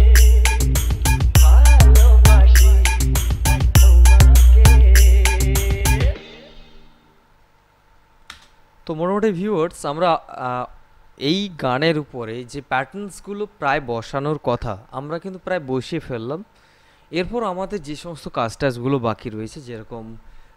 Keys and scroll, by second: 8.2 space.